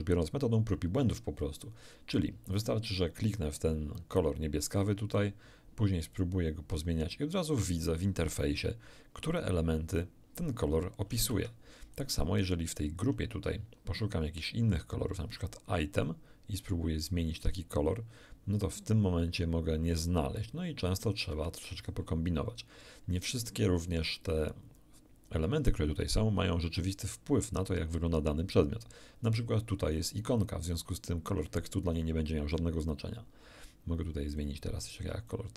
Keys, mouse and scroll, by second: 4.7 click, 6.1-12.1 drag, 11.3 Escape, 16.0 click, 17.1-22.0 drag, 21.3 Escape, 34.3 click, 35.3-35.5 drag.